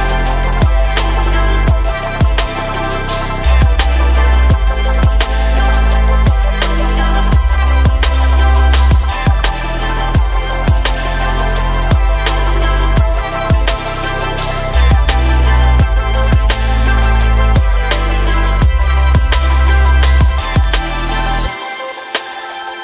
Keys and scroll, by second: 4.8 r, 5.8 KP_9, 6.2 KP_0, 6.8 Return.